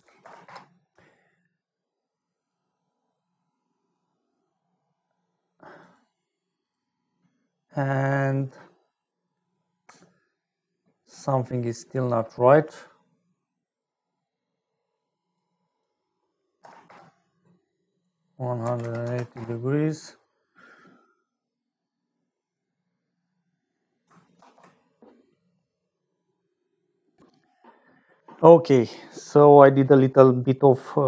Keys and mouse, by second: 3.5 middle click, 5.7 click, 6.5 click, 11.7 middle click, 12.7-15.3 drag, 15.6-17.6 drag, 17.9-20.0 drag, 24.3 ctrl+s, 27.2-31.0 middle drag.